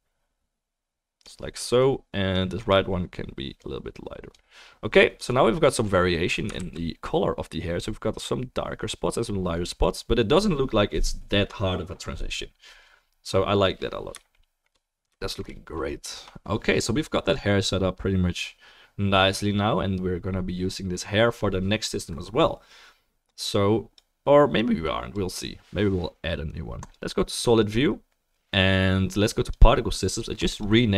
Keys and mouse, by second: 1.8 click, 3.7-9.6 middle drag, 7.1 ctrl+s, 9.6-30.9 right drag, 23.3-26.9 drag, 25.4-30.9 middle drag, 30.6-30.9 drag.